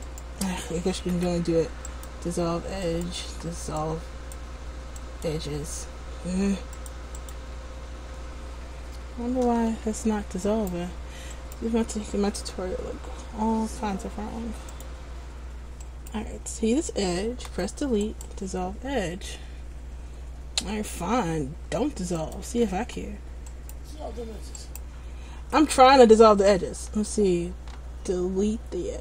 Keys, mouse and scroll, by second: 0.2 right click, 1.3 Delete, 3.0 right click, 3.4 Delete, 6.9 click, 9.6 a, 10.6 right click, 14.9 click, 16.0 right click, 17.7 Delete, 20.9 r, 22.6 ctrl+z, 23.7 right click, 25.7 Delete.